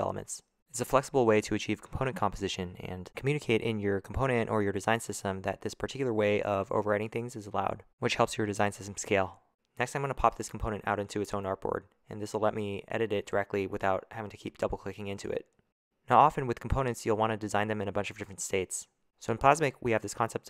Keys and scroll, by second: 0.0-0.5 typing, 15.4 o.